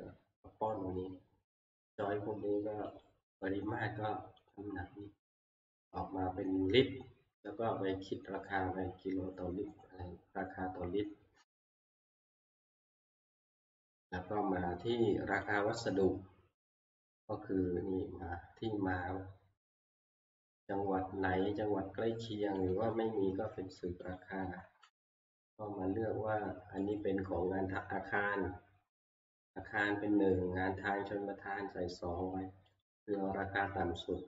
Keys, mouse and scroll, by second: 2.0 click, 3.0 click, 4.5 click, 6.0 click, 10.1 scroll, 11.0 scroll, 15.7 click, 16.5 scroll, 22.7 click, 24.2 click, 24.5 Right, 24.7 Right, 27.0 click, 29.4 Down, 32.0 click, 32.8-34.2 drag, 33.2 Right, 33.5-34.1 Right.